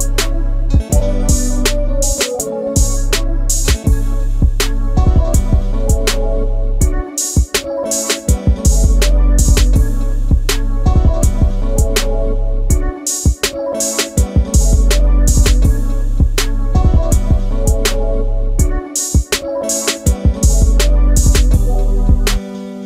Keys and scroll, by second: 5.1 ctrl+z, 7.0 space, 11.4 m, 16.2 space, 19.1 shift+m.